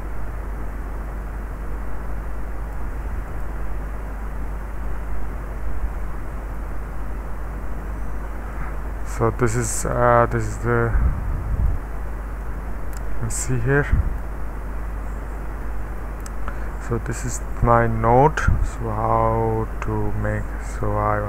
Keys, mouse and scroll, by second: 3.3 click, 6.0 middle click, 6.8-7.9 scroll up 1, 7.9-9.4 scroll down 1, 9.4-10.6 middle drag, 10.2 space, 10.8-11.7 middle drag, 12.4-14.2 drag, 14.4 space, 15.6 middle click, 16.3-16.8 scroll down 1, 16.8 middle click, 17.3 space, 17.9-20.3 middle drag, 20.7 click.